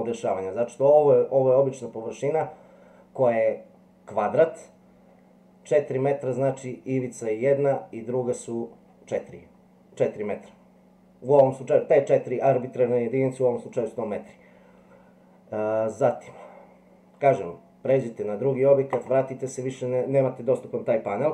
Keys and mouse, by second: 10.0-10.7 drag, 19.0 click.